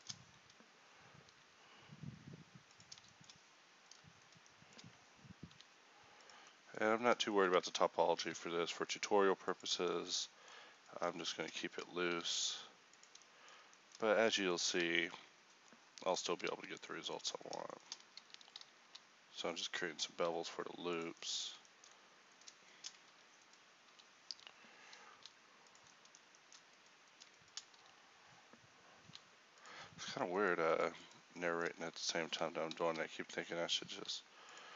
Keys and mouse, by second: 0.3-1.4 drag, 1.4 ctrl+b, 4.9 click, 5.5 ctrl+b, 8.3 ctrl+b, 11.7 click, 12.1 ctrl+b, 15.1 ctrl+v, 16.5 ctrl+b, 18.9 ctrl+v, 20.2 ctrl+b, 23.6 click, 23.9 ctrl+v, 25.2 ctrl+b, 27.8 ctrl+v, 29.1 ctrl+b, 31.5 middle click, 32.0 ctrl+v, 32.9 ctrl+v, 34.1 ctrl+b.